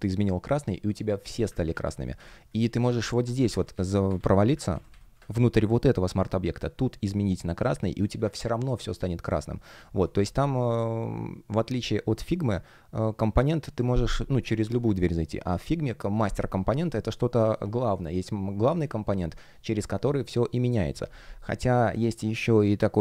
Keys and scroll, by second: 1.5 super+z, 3.4 super+z, 4.6 super+z, 8.5 alt+super+c.